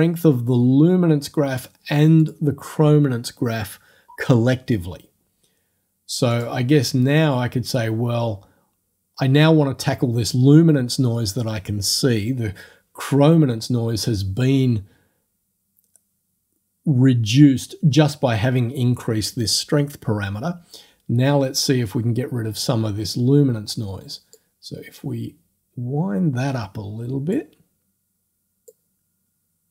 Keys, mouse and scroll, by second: 2.2 click, 6.4 click, 24.4-27.5 drag, 28.7-29.7 drag.